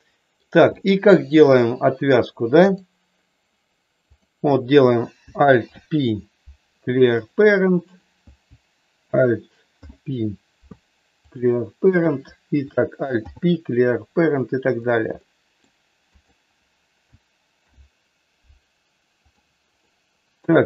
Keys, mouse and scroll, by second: 0.6 middle click, 2.7 click, 4.1 click, 5.5 alt+p, 7.9 click, 9.6 alt+p, 11.7 click, 13.1 alt+p, 15.1 middle click, 16.1 click, 17.5 alt+p, 19.7 middle click.